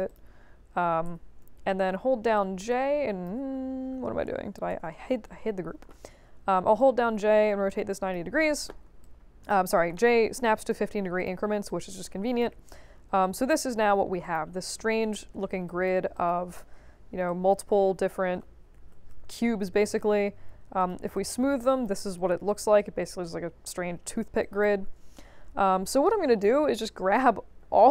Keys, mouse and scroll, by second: 0.0 click, 1.0 e, 1.6 h, 2.3 click, 4.0 ctrl+z, 4.7 shift+h, 6.4 j, 6.7-8.1 drag, 9.0 alt+click, 9.9 alt+middle click, 10.4 alt+drag, 11.1 click, 11.6 alt+click, 12.7-14.3 drag, 14.7 scroll up 2, 15.6 alt+drag, 16.1 drag, 16.6 3, 17.2 alt+click, 18.0 middle click, 18.7 ctrl+z, 19.0 1, 19.7 click, 20.3 3, 20.7 click, 21.1-21.8 alt+drag, 22.1-23.6 alt+drag, 24.4 click, 24.8 1, 25.8 click.